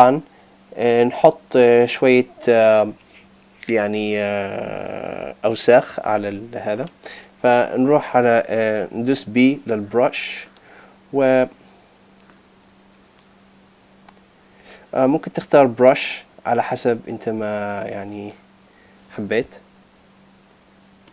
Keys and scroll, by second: 14.6 super+z.